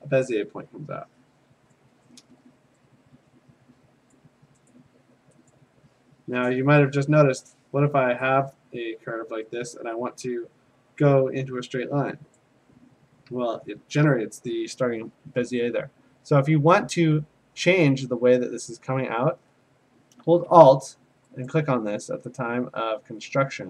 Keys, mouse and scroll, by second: 1.7 click, 4.1 click, 4.7 click, 5.5 click, 9.7 click, 12.4 click, 16.3 click, 21.5 alt+click.